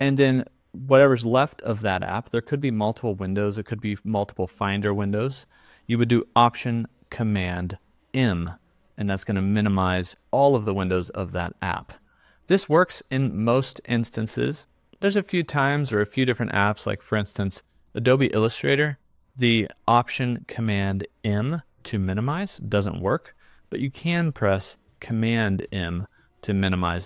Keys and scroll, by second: 8.1 alt+super+m, 21.3 alt+super+m, 25.6 super+m.